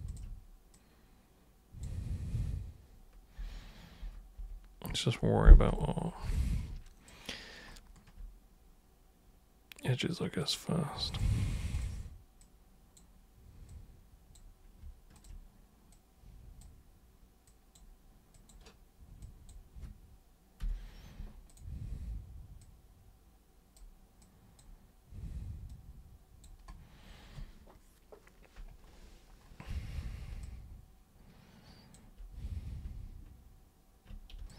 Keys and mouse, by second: 0.0 shift+super+click, 0.7-1.8 super+drag, 6.3 alt+super+click, 10.4 super+click, 11.1 super+click, 11.7 shift+click, 12.4 click, 13.7 click, 15.1 shift+click, 15.9 click, 17.4 click, 18.3 click, 19.2 click, 21.5 click, 22.6-23.7 drag, 24.2 click, 25.7 click, 30.4-31.9 alt+super+drag, 34.4-34.5 alt+super+drag.